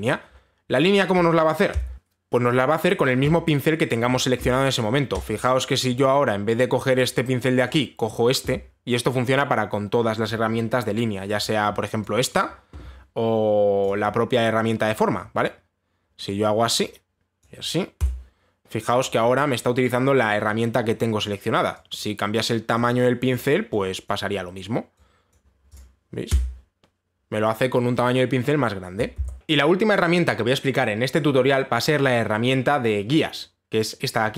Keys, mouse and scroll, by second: 1.8 click, 1.9 ctrl+z, 5.8 click, 7.6 click, 8.3 click, 12.1 click, 12.9 click, 14.5 click, 15.6 click, 17.0 click, 18.0 click, 18.7 Return, 23.4 click, 24.0 click, 24.7 click, 26.0 click, 26.4 click, 27.0 Return.